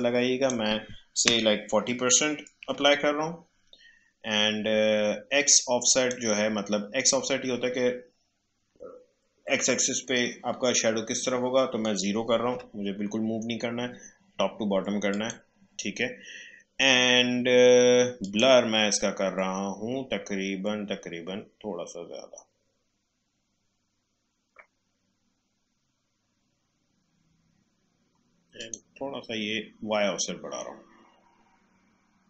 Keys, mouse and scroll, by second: 2.6 typing, 5.4 typing, 5.4-8.7 drag, 12.5 0, 15.1 click, 18.2 click, 21.3-23.5 scroll up 1, 24.6-26.8 scroll up 1, 28.5 click, 29.3-31.9 scroll up 1.